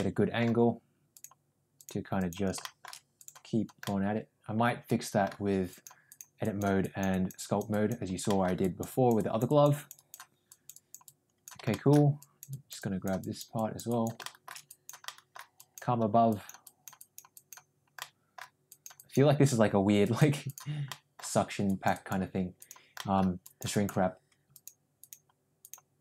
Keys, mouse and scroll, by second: 1.0 click, 1.7 click, 2.1 click, 2.5 shift+middle click, 3.1 click, 3.8-5.2 middle drag, 5.6 click, 6.0 click, 6.4 click, 6.8 click, 7.0 click, 7.3 click, 7.6 click, 8.2 middle click, 8.6 click, 8.8 click, 9.1 click, 9.6 click, 9.9 click, 10.4 click, 11.0 click, 11.7 shift+middle click, 12.1 click, 12.5 click, 12.7 click, 13.2 click, 13.5 click, 13.8 click, 14.2 shift+middle click, 14.6 click, 15.0 middle click, 15.6 click, 16.3 click, 16.6 click, 17.0 click, 17.3 click, 18.0 middle click, 18.6 click, 18.9 click, 19.9 click, 20.4 click, 20.8 middle click, 21.6 click, 22.5 click, 22.9 middle click, 23.3 click, 23.6 click, 24.4 click, 24.9 click, 25.5 click.